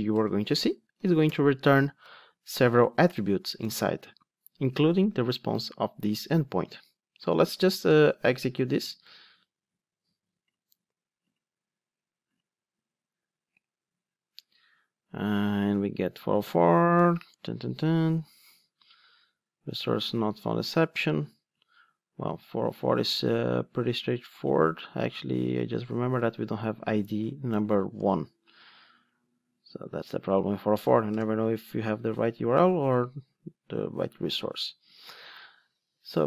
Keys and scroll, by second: 2.0 alt+super+l, 9.2 ctrl+d, 35.0 super+r.